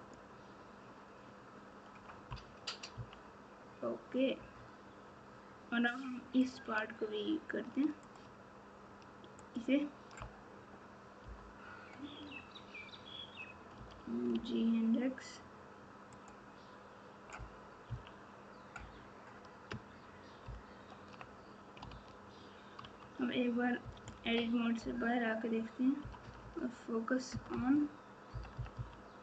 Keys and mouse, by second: 2.9 KP_3, 6.4 click, 11.2 KP_7, 13.7 g, 17.8 KP_3, 20.4 ctrl+KP_4, 20.9 ctrl+KP_4, 21.8 alt+z, 22.8 Tab, 23.8 KP_Subtract, 24.0 KP_Subtract, 24.2 KP_Subtract, 24.7 KP_Divide, 28.7 KP_4.